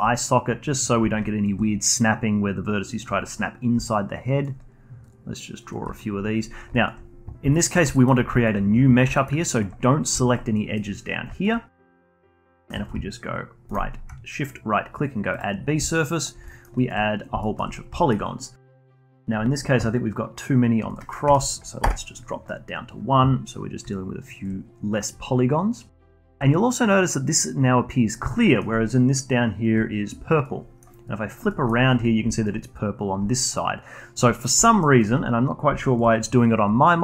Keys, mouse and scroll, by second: 0.6-1.2 scroll up 1, 1.2-3.7 alt+drag, 3.7 d, 3.9 click, 4.4-4.9 d, 5.0 click, 5.7 d, 6.0-6.7 scroll down 8, 6.7-7.9 alt+drag, 7.9 alt+middle click, 8.3 alt+click, 9.1 alt+middle click, 9.4-10.5 alt+drag, 10.5 alt+middle click, 10.9-11.3 scroll up 2, 11.3 alt+click, 11.5 scroll up 1, 11.8 alt+middle click, 12.0 alt+click, 12.2-12.6 scroll up 1, 12.6-13.7 alt+middle drag, 13.7-15.8 shift+right drag, 15.8-16.4 alt+drag, 16.4-16.7 alt+middle drag, 16.7 alt+click, 17.0-17.4 scroll up 1, 17.4-20.9 alt+middle drag, 20.9-25.2 drag, 25.2-25.9 scroll down 2, 26.0-27.9 alt+drag, 27.9 scroll down 2, 28.3-31.0 alt+middle drag, 31.0-31.5 alt+drag, 31.5 alt+middle drag, 31.7 alt+drag, 32.0 scroll up 3, 32.2-34.6 alt+drag, 34.6 alt+middle drag, 34.9 alt+click, 35.2-35.8 scroll down 2, 35.8 alt+click, 36.6-37.0 scroll up 5.